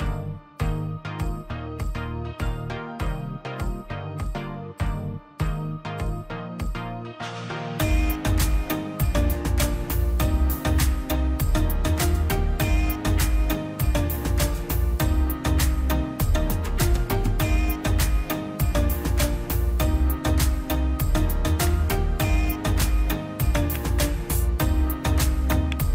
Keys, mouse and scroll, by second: 0.5 scroll down 1, 1.8 click, 3.1 click, 4.6 middle click, 5.2 middle click, 5.6 scroll down 1, 6.0 click, 6.3-6.7 scroll down 1, 6.7 click, 7.0 middle click, 7.4-7.9 scroll up 1, 7.9 click, 8.7 ctrl+click, 9.3 ctrl+z, 9.5 click, 10.2 scroll down 1, 10.4 middle click, 10.9 click, 11.5 scroll down 1, 11.8 middle click, 12.2 scroll up 1, 13.0 middle click, 13.4-13.9 scroll up 2, 13.6 click, 14.2 click, 14.6 middle click, 15.2 click, 15.7 middle click, 16.0-16.3 scroll up 1, 16.3 click, 16.5-16.9 scroll down 1, 16.9 middle click, 17.2 click, 17.3-17.6 scroll down 1, 17.9 click, 18.1-18.6 scroll down 1, 18.7 middle click, 19.2 scroll up 1, 19.5 click, 19.7 scroll down 1, 20.0 middle click, 21.0 scroll down 1, 21.2 middle click, 21.7 middle click, 22.5 space, 22.8 click, 25.0 middle click, 25.7 scroll down 1.